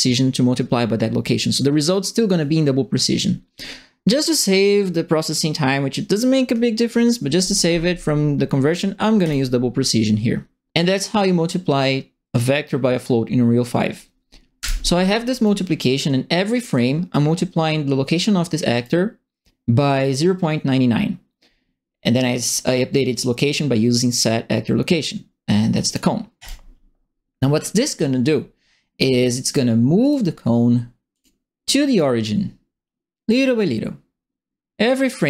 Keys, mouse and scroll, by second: 9.2 click, 14.5 Delete, 15.4 right click, 18.7 click, 22.4 click, 25.7 click, 26.4 click, 29.4 click, 30.0 click, 31.1 click, 31.9-33.2 right drag.